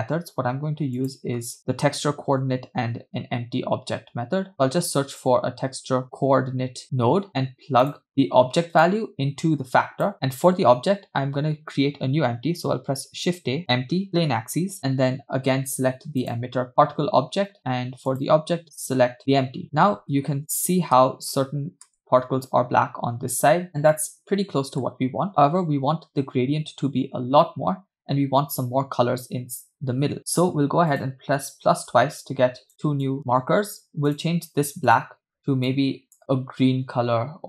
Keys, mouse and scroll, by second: 0.7 shift+a, 6.8 o, 8.1 middle click, 8.9-10.1 drag, 12.9 shift+a, 16.7 click, 18.1-19.5 drag, 20.3 space, 21.1 space, 21.5 space, 22.1 space, 23.7 scroll up 2, 23.9-25.0 middle drag, 25.4 scroll up 1, 30.2 click, 30.9 click, 31.9-32.7 drag, 33.0 click, 34.1 click, 34.9 click.